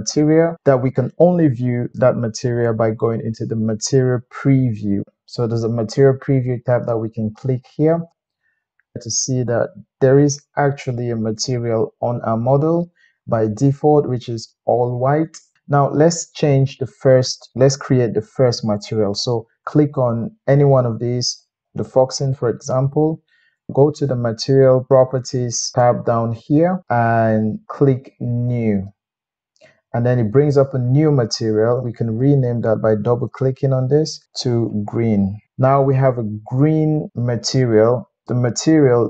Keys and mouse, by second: 21.4 click, 21.6-23.7 middle drag, 24.1 click, 28.6-39.0 drag, 35.4 e.